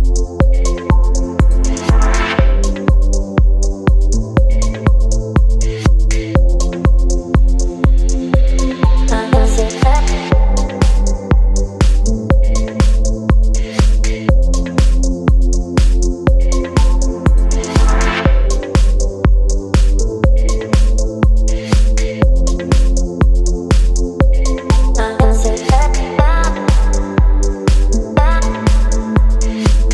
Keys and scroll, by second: 0.8 v, 3.3 space, 11.0 space, 14.8 b.